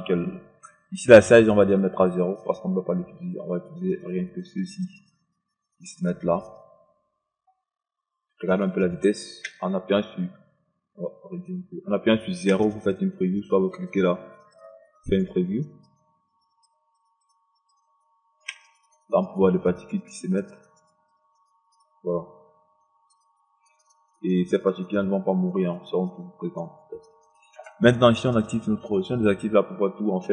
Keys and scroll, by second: 9.4 0, 12.5 KP_0, 18.5 KP_0.